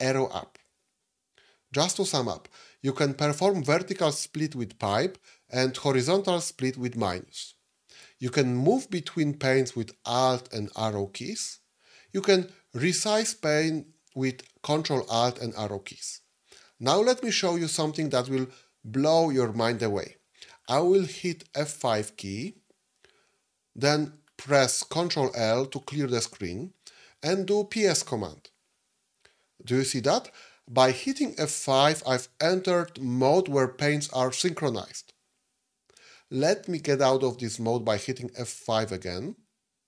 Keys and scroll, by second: 4.8 ctrl+a, 4.8 |, 7.0 ctrl+a, 7.0 -, 10.0 alt+Left, 10.0 Up, 10.0 Right, 14.8 ctrl+alt+Left, 21.7 F5, 24.9 ctrl+l, 38.5 F5.